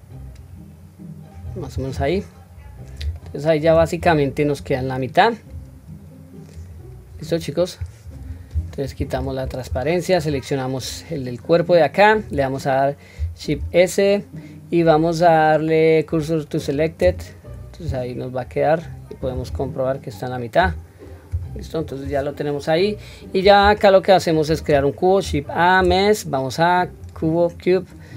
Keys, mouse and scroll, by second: 2.1-3.0 scroll down 3, 3.2-3.7 shift+middle drag, 4.0-4.6 scroll down 1, 4.6-4.9 scroll down 1, 5.5-6.1 scroll down 1, 6.5 click, 9.2 q, 10.2 click, 13.6 shift+s, 18.4-19.5 scroll up 1, 19.5-20.6 scroll up 2, 19.5 q, 21.3 scroll down 1, 23.6 scroll down 1, 23.8-24.3 shift+middle drag, 25.2 shift+a.